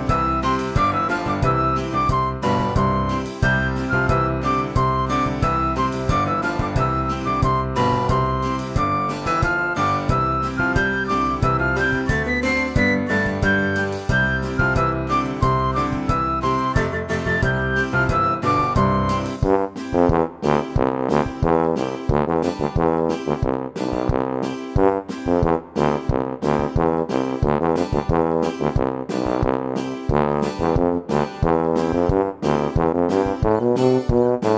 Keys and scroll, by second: 32.5 typing.